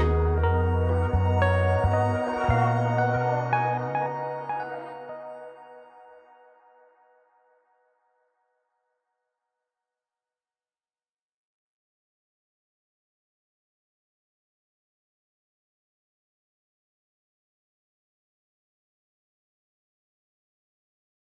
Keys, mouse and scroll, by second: 3.1 click, 6.8 click, 8.9 click, 11.3 click, 17.7 click, 18.9 click.